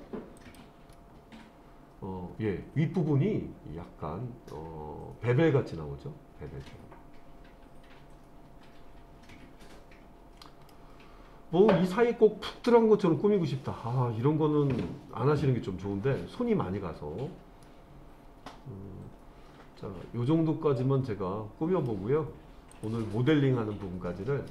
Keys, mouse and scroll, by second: 0.4 click, 1.0-10.7 middle drag, 17.6-21.9 middle drag, 22.7 click, 23.3-24.5 middle drag.